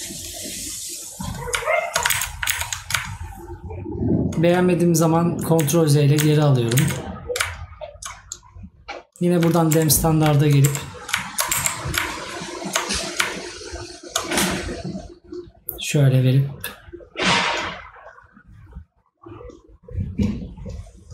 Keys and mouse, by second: 15.3 click.